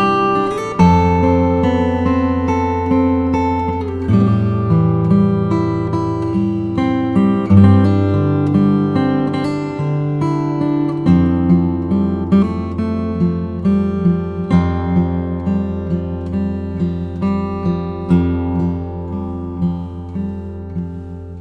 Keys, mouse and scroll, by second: 0.2 click, 2.3 typing, 3.6 click, 6.0 typing, 9.4 click, 9.4 typing, 21.3 click.